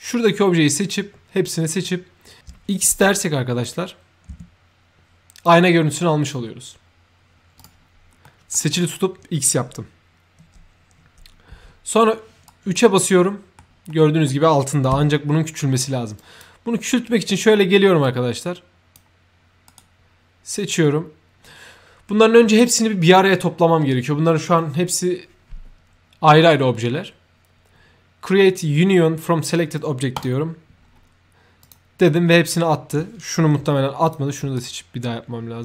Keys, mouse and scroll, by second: 2.3 shift+l, 3.5-5.3 drag, 3.6 l, 4.2 x, 7.5 click, 8.1 middle click, 8.6 right drag, 12.3 right click, 12.9 middle click, 13.8 middle click, 16.1 click, 17.9 click, 19.6 right click, 30.1 click, 31.5 click, 34.0 click, 34.5 shift+right click, 35.5 shift+click.